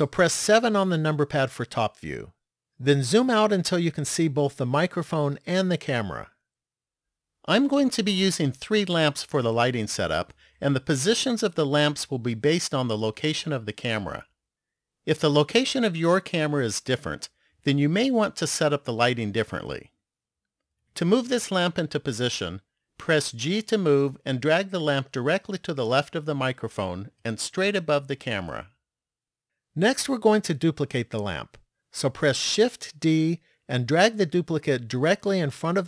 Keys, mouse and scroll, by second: 0.7 KP_7, 3.5-4.0 scroll down 1, 4.0-5.0 scroll down 1, 23.5 g, 32.6 shift+d.